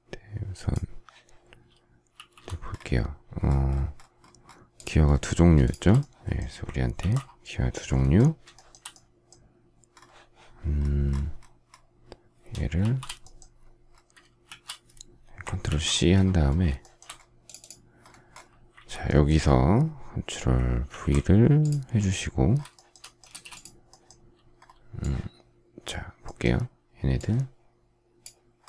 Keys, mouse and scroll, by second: 2.0 shift+c, 5.5 shift+click, 6.8 ctrl+c, 8.4 shift+middle click, 12.7 shift+h, 14.3 shift+c, 15.5 ctrl+c, 15.7 ctrl+scroll down 1, 16.6 shift+middle click, 20.7 ctrl+v, 22.7 shift+middle click, 23.1 space.